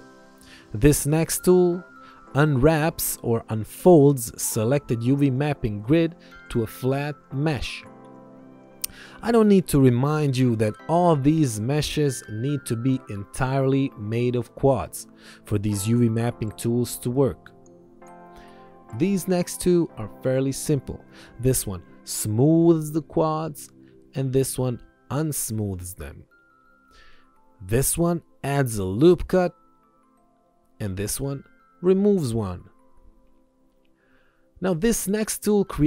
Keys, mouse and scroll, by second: 1.2 click, 9.6 ctrl+1, 19.0 click, 22.7 alt+y, 23.3 alt+y, 23.7 click, 24.1 alt+y, 24.4 click.